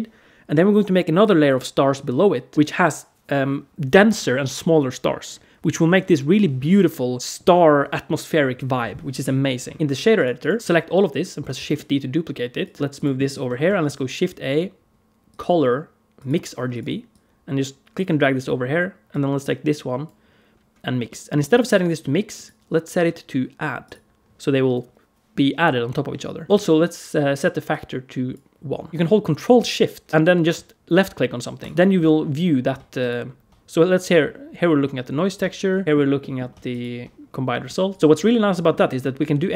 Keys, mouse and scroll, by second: 9.7 click, 9.8 click, 9.8 middle click, 9.8 scroll down 2, 9.8 g, 10.2 click, 10.5 middle click, 10.6 click, 11.4 shift+d, 12.7 scroll up 2, 12.8 middle click, 12.8 click, 12.8 g, 13.0 middle click, 13.5 shift+a, 16.9 click, 18.9 click, 20.9 middle click, 22.2 click, 25.9 middle click, 26.4 click, 26.4 scroll down 1, 26.5 middle click, 27.5 click, 28.7 middle click, 31.4 ctrl+shift+click, 31.7 ctrl+shift+click, 31.7 middle click, 32.8 ctrl+shift+click, 35.7 middle click, 36.0 middle click, 36.5 ctrl+shift+click, 37.7 ctrl+shift+click, 38.0 middle click, 38.0 click, 38.3-38.6 scroll up 1, 38.6 middle click, 39.4 click.